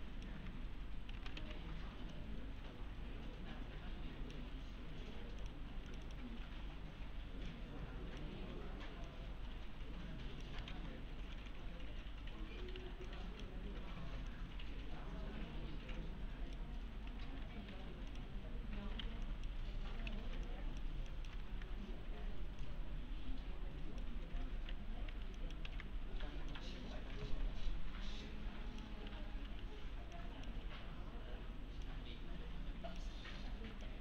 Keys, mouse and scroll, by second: 0.4 w, 1.4 shift+w, 2.1-4.6 shift+click, 5.7 shift+2, 5.9 shift+click, 6.7 shift+e, 7.5-8.4 shift+click, 8.4 shift+w, 9.1-10.7 shift+click, 10.7 alt+x, 12.8 1, 13.1-13.7 click, 14.6-16.8 click, 17.7 3, 18.1 click, 19.0 1, 19.3 click, 20.1 ctrl+z, 20.5-21.1 click, 21.1 ctrl+click, 21.5 e, 22.6-24.2 click, 24.0-25.7 typing, 24.5 scroll up 1, 25.4 click, 26.5-29.0 click, 29.1 1, 29.5 1, 30.2 click.